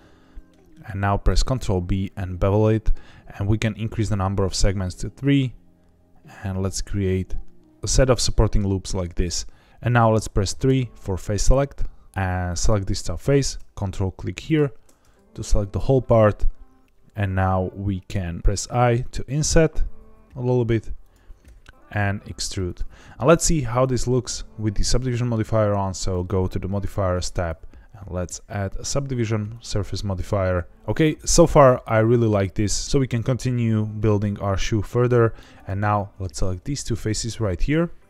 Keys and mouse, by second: 1.2 ctrl+b, 9.6 middle click, 9.7 2, 10.6 3, 10.9-12.0 middle drag, 18.4 i, 21.0 click, 21.4 e, 22.6 click, 25.9 click, 27.3-29.6 drag, 31.1 middle click, 34.6 middle click, 35.5 click, 37.5 shift+click.